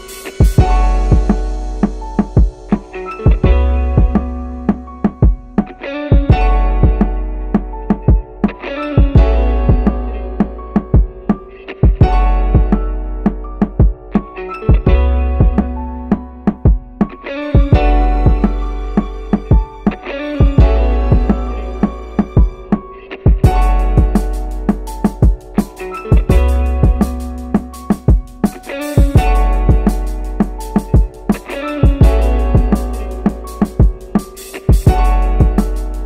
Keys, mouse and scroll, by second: 2.2-2.5 scroll down 1, 2.5-3.1 middle drag, 4.2 shift+d, 5.4 y, 6.1 click, 6.7 middle click, 8.0-11.3 drag, 12.6 shift+d, 12.8 x, 13.7 click, 15.3 click, 17.0-17.4 scroll up 1, 17.4-17.7 scroll down 1, 17.7-18.2 shift+middle drag, 18.3 scroll up 1, 19.5 shift+d, 20.9 x, 21.6 click, 23.3 click, 24.9 click, 25.2 click, 26.0-26.7 middle drag, 26.6 scroll up 2, 27.6 click, 28.2-28.8 middle drag, 28.8 scroll up 1, 30.3 click, 30.9-33.3 middle drag, 34.2 click, 34.9-36.0 middle drag.